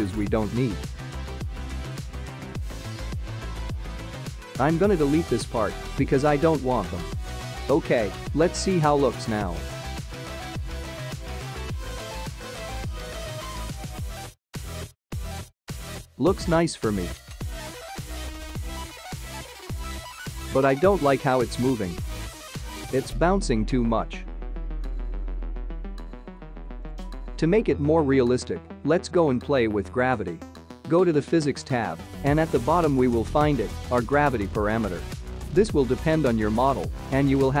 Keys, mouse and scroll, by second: 0.7 click, 1.5 middle click, 2.0-2.4 scroll down 4, 2.4 middle click, 3.6 click, 4.5 g, 5.9 h, 7.3 click, 7.8 click, 8.0 space, 17.0 space, 17.6 middle click, 17.9 space, 19.8 space, 19.9 click, 20.0 space, 23.7 space, 25.8 click, 26.7 click, 28.5 click, 30.6-34.3 scroll down 33, 34.3 click, 35.6 click, 36.4-37.6 scroll down 6.